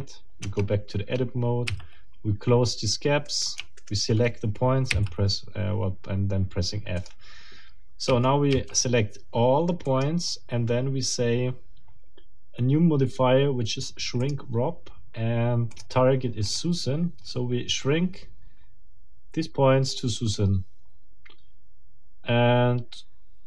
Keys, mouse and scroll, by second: 0.4 Tab, 1.2 scroll up 2, 1.7 f, 2.4 scroll down 2, 3.2 right click, 3.8 shift+right click, 4.9 shift+f, 7.0 click, 8.1 a, 9.8 click, 14.2 click, 15.7 click, 16.5 click.